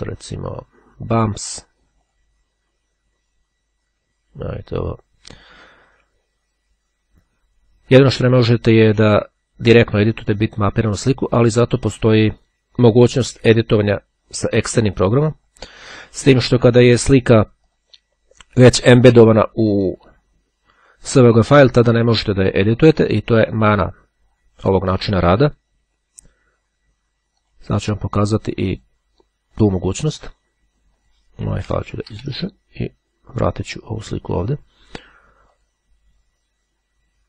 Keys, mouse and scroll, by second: 2.2 click, 9.6-12.4 right drag, 12.4 click, 15.4 click, 15.9-17.2 drag, 24.1-28.1 drag, 28.8 click, 31.1 click, 31.5 scroll up 1, 32.0 shift+Delete, 32.4 shift+Return, 33.0-33.6 scroll up 1, 33.6-34.7 drag, 35.6 click.